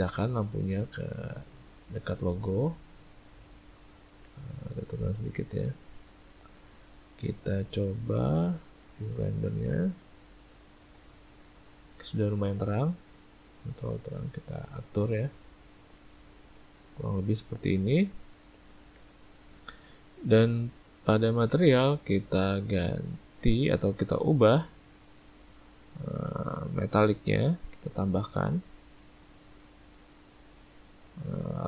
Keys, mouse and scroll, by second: 1.2 click, 2.7 middle click, 4.2 ctrl+middle click, 4.9 click, 6.7 ctrl+middle click, 7.3 middle click, 7.8 middle click, 8.0 z, 9.2 ctrl+middle click, 9.4 ctrl+middle click, 9.7 ctrl+middle click, 10.4 middle click, 11.0 ctrl+middle click, 11.1 ctrl+middle click, 11.7 ctrl+middle click, 12.9 click, 14.5 middle click, 15.3 click, 17.3 middle click, 17.9 ctrl+middle click, 18.1 ctrl+middle click, 18.7 middle click, 19.0 middle click, 19.4 middle click, 20.4 click, 21.0 middle click, 23.2 click, 25.5 click, 29.4 click.